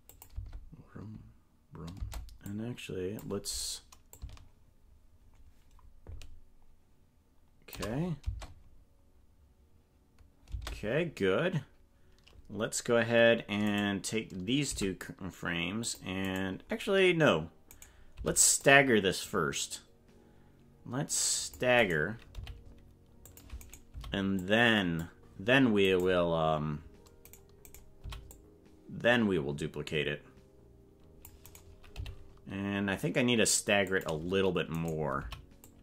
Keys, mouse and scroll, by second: 0.1 click, 0.3 space, 2.0 space, 2.4 click, 4.2-7.8 shift+drag, 8.2 space, 10.5 space, 13.6 right click, 14.7 c, 17.7 right click, 18.1 c, 22.3 g, 23.6 right click, 23.9 c, 27.2 right click, 28.0 c, 31.9 g, 34.7 right click, 35.2 c.